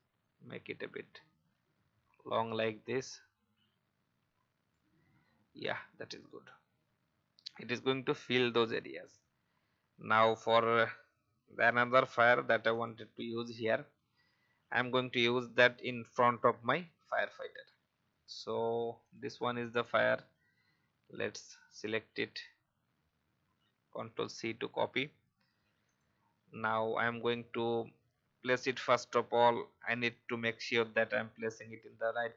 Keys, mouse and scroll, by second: 22.3 v, 25.8 click, 30.2 alt+scroll up 1, 31.6 click.